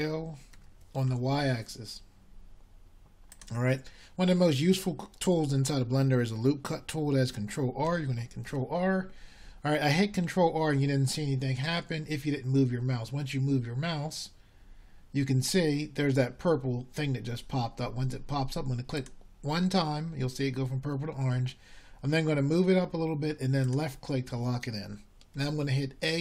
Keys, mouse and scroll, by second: 2.8 s, 10.8 ctrl+r.